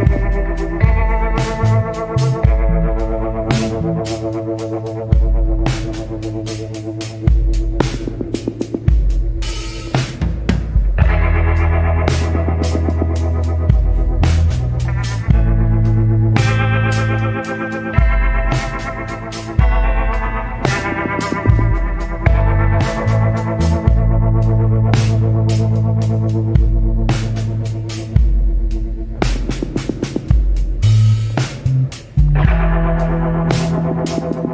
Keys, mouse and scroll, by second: 2.7 scroll down 1, 4.3 scroll up 1, 7.4 scroll down 1, 23.1 scroll down 1, 28.9 scroll down 1, 29.6 scroll up 1.